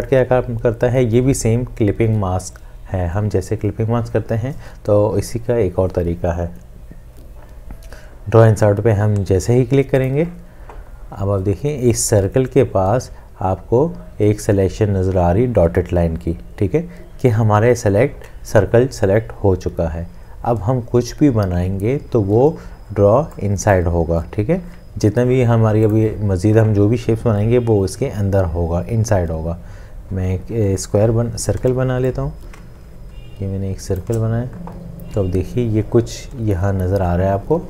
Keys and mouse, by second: 31.6 l, 32.7 shift+click.